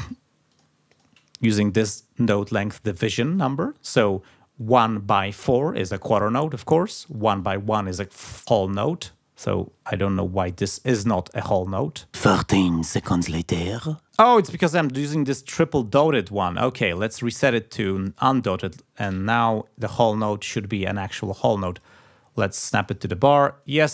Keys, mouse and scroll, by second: 0.0 click, 0.5 click, 0.9 click, 7.0 click, 16.5 click, 19.9 click, 21.7 click, 22.8 click.